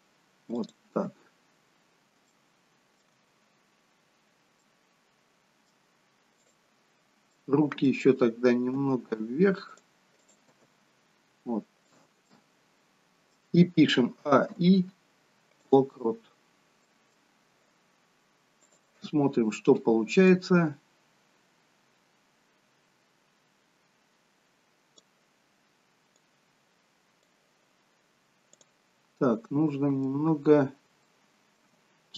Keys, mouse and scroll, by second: 2.5 shift+middle click, 4.8 middle click, 6.4 click, 7.0-7.4 scroll down 1, 7.4 middle click, 8.8 g, 10.2 click, 10.6 g, 12.3 middle click, 14.1 a, 14.5 i, 16.5-17.0 scroll down 1, 17.0 middle click, 18.7 click, 20.3 click, 26.3 click, 28.6 click, 29.5 middle click, 30.4-31.1 scroll up 4, 31.1 shift+middle click.